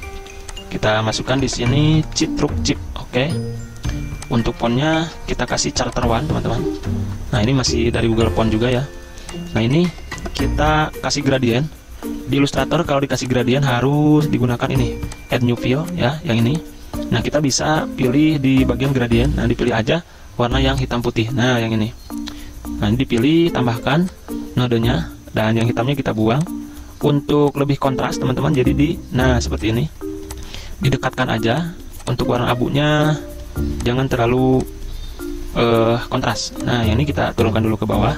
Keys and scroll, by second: 0.2 t, 1.4 Caps_Lock, 1.5-2.5 typing, 4.9 ctrl+shift+], 6.2-7.3 typing, 9.2 z, 11.0 v, 37.1 g.